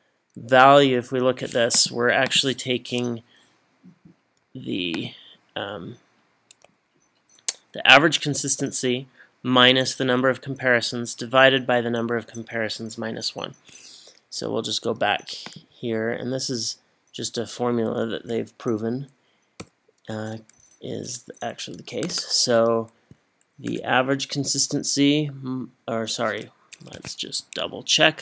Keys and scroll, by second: 19.6 =, 27.0 Escape.